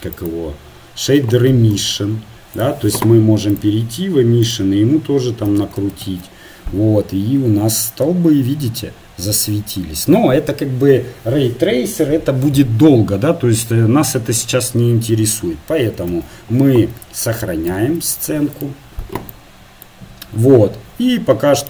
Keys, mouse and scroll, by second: 1.2 right click, 2.6-6.2 drag, 5.8 KP_0, 16.3 shift+z.